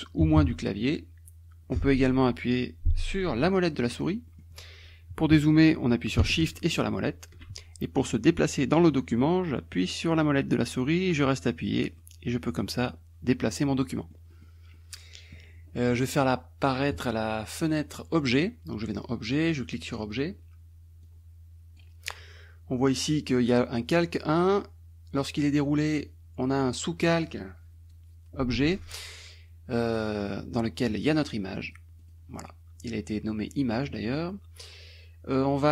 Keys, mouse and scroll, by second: 0.3 KP_Subtract, 3.7 middle click, 4.4-6.2 middle drag, 6.7 shift+click, 7.3 shift+middle click, 11.2-14.6 drag, 14.8 click, 16.9 click, 19.5 click, 21.1 click, 23.5 click, 24.5 click, 25.4-30.3 drag, 31.6 click, 32.1 click, 35.5 click.